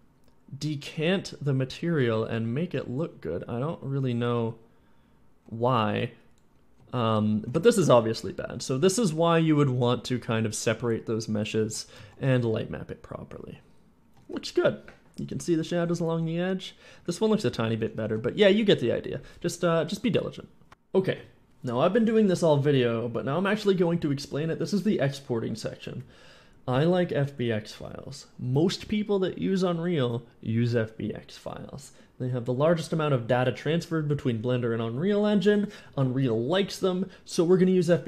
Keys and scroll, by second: 1.5-4.4 typing, 6.6 d, 6.6 w, 8.6 a, 8.9 w, 10.0-12.1 typing, 15.4 d, 15.6 w, 17.8 d, 17.8 w, 21.0 a, 23.1 a, 36.6-37.7 typing.